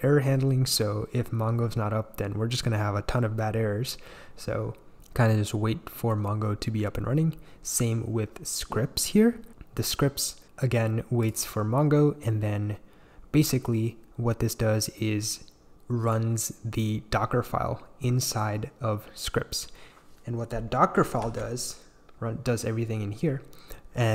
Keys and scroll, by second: 21.2 shift+super+e.